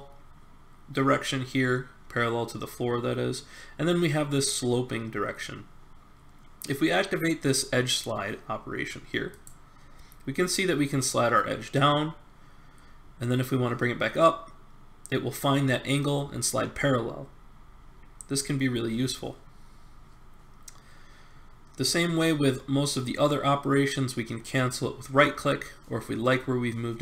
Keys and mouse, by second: 9.3-11.0 drag.